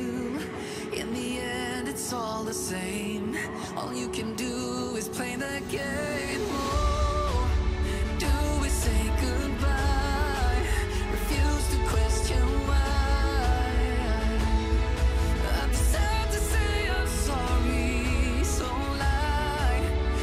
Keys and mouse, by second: 2.2 click, 2.6 click, 2.9 click, 4.0 click, 4.4-5.8 middle drag, 6.3 middle click, 9.0 click, 10.0 click, 10.7 g, 12.0 click, 12.2 middle drag, 13.0 click, 13.7 click, 14.1 click, 16.3 middle click, 16.9 click, 17.1 click, 17.7 middle click, 18.2 click, 18.4 middle click, 19.0 click, 20.1 middle click.